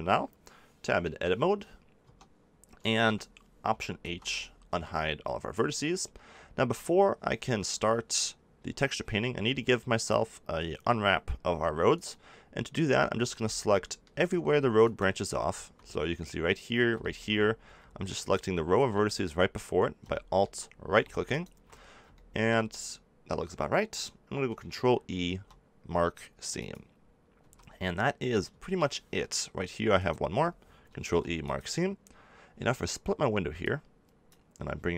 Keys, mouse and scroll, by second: 1.0 KP_7, 2.0 Tab, 3.9 alt+h, 4.6 a, 7.1 middle click, 13.6-16.7 middle drag, 16.7 middle click, 18.1-19.7 middle drag, 20.1 click, 20.3 click, 20.4-21.7 drag, 21.7-23.8 middle drag, 25.0 ctrl+e, 27.3 a, 29.9 click, 30.9 ctrl+e, 33.5 click.